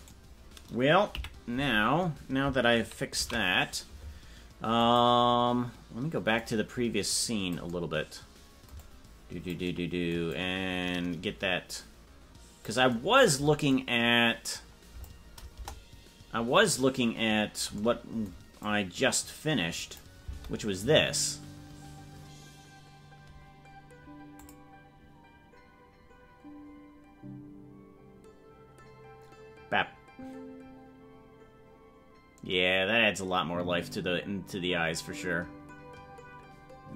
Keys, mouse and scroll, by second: 0.1 right click, 1.1 KP_Decimal, 5.7 ctrl+s, 5.9 click, 6.4-7.7 drag, 8.8-9.6 drag, 10.3-12.7 drag, 13.7-15.1 drag, 15.5 KP_0, 17.0 click, 18.7-20.0 drag, 20.2 space, 24.5 click, 33.0 scroll.